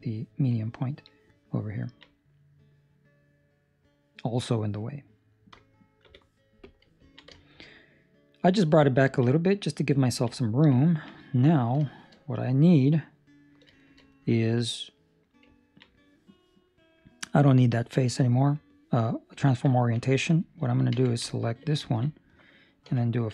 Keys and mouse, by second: 1.8 ctrl+middle click, 2.0 middle click, 4.8 middle click, 7.0 ctrl+middle click, 7.2 shift+middle click, 7.6 middle click, 9.0 ctrl+middle click, 9.3 middle click, 10.0 ctrl+middle click, 10.4 middle click, 10.7 ctrl+middle click, 11.8 shift+middle click, 12.3 middle click, 13.7 shift+middle click, 14.0 middle click, 15.5 ctrl+middle click, 17.3 click, 19.4 ctrl+middle click, 20.5 Escape, 20.9 2, 21.4 alt+right click, 21.8 ctrl+middle click, 22.1 middle click, 22.9 f.